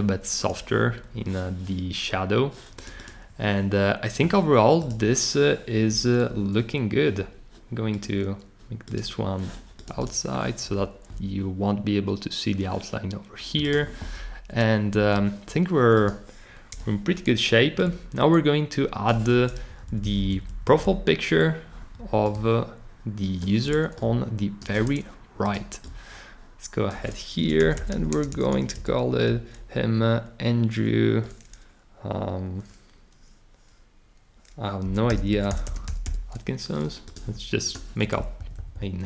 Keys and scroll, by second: 16.7 o, 19.7 Up, 19.8 Up, 20.0 Up, 20.1 Up, 20.3 Up, 20.4 Up, 20.6 Up, 20.8 Up, 27.3 Return, 27.4-29.0 typing, 34.6-36.5 typing, 38.4 shift+Right, 38.7 shift+Right.